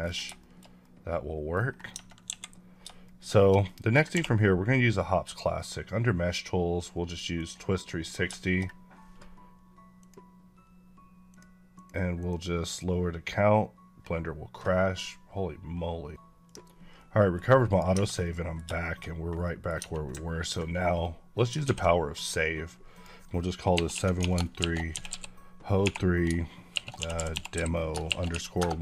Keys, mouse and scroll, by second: 0.1 scroll down 3, 0.4 shift+middle click, 1.7 scroll down 1, 1.9 Tab, 2.2 KP_1, 3.0 shift+middle click, 4.1 q, 7.4 click, 8.0 scroll down 2, 8.4 shift+middle click, 10.0 click, 11.8 click, 17.3 scroll up 1, 17.5 click, 17.8 Tab, 18.0 scroll up 1, 18.1 middle click, 18.6 shift+middle click, 19.3 middle click, 19.6 Tab, 21.5 ctrl+s, 22.8 click, 23.5-25.7 typing, 26.7-27.4 typing, 28.4 Return.